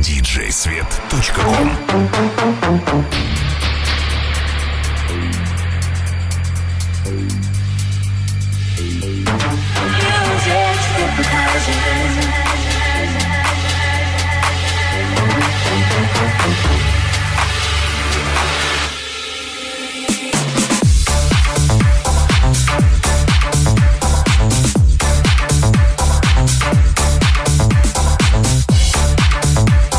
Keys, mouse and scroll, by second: 0.8 middle click, 2.1 ctrl+middle click, 2.3-7.8 ctrl+middle drag, 3.6 s, 7.8 alt+click, 7.9-20.4 alt+middle drag, 20.5-26.2 middle drag.